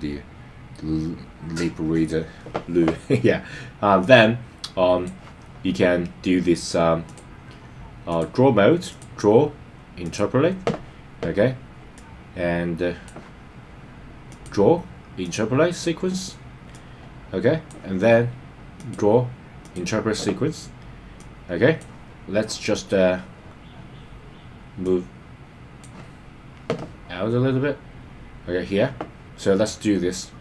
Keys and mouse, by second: 0.8 click, 4.0-5.0 drag, 7.2-8.2 drag, 9.0-10.2 drag, 11.9-13.0 drag, 14.2-15.4 drag, 16.7 click, 18.7-19.8 drag, 21.1 click, 24.8-25.8 drag.